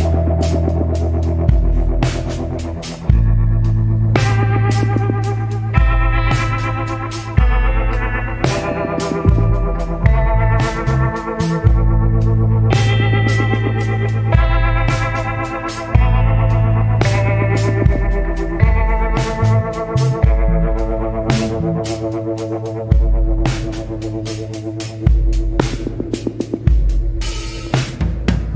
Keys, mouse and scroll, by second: 1.8 scroll up 1, 9.5 scroll up 1, 17.6 scroll up 1.